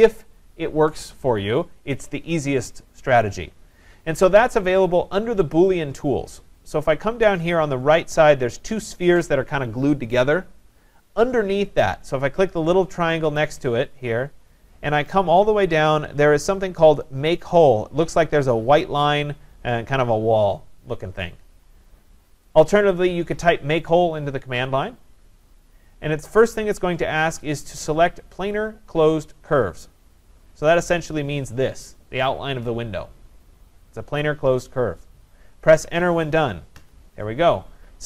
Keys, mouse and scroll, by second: 13.6 click, 22.7 click, 30.8 click, 36.8 Return.